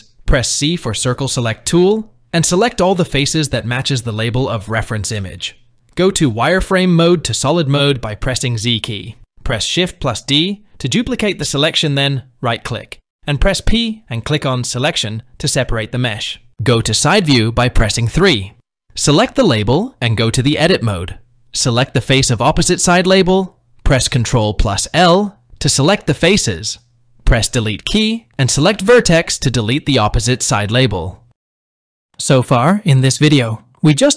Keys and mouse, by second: 1.6 c, 5.8 z, 8.9 shift+d, 13.5 p, 16.2 KP_3, 18.7 Tab, 19.3 click, 20.7 Tab, 21.3 click, 25.0 ctrl+l, 27.5 Delete, 31.4 Tab, 33.0-34.1 middle drag.